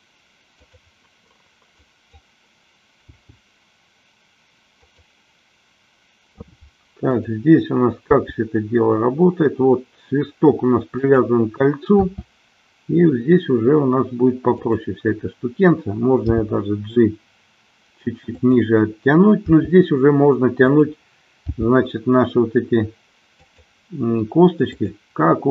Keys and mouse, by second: 0.7 click, 1.7 click, 3.1 g, 7.0-8.4 drag, 8.5 g, 11.1 click, 12.2 r, 14.7 click, 16.4 g, 19.6 r, 21.7 g, 23.6 click, 24.7-25.5 drag.